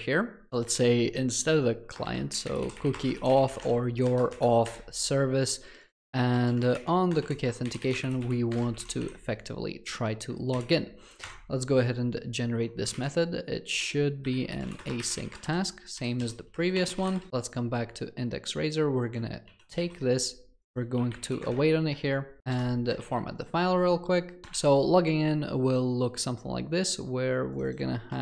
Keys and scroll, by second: 0.9 ctrl+v, 7.2 Return, 10.5 alt+Return, 19.6 ctrl+x, 24.5 ctrl+v.